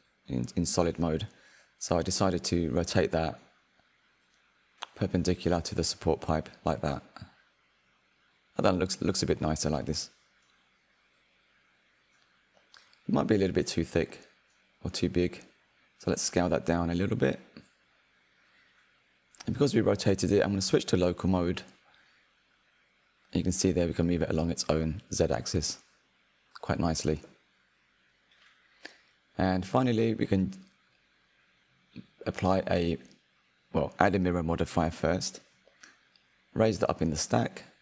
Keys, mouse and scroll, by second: 1.2-1.7 scroll down 3, 2.4 click, 5.2 r, 8.1 click, 12.1-13.7 shift+middle drag, 13.7-16.0 drag, 16.2 r, 16.9 click, 17.7 Tab, 18.0 3, 18.1 a, 18.3 s, 19.8 Tab, 20.0 middle click, 20.4 click, 20.5 scroll down 2, 20.6 click, 20.6-21.8 middle drag, 21.8 click, 22.9-24.4 drag, 24.4-25.8 middle drag, 25.8 click, 29.0-31.2 middle drag, 30.4 scroll, 30.7 scroll down 3, 31.2 scroll up 1, 31.3-32.0 middle drag, 32.0 scroll down 1, 32.3-32.9 shift+middle drag, 32.9 click, 34.9 click, 36.9-37.8 drag.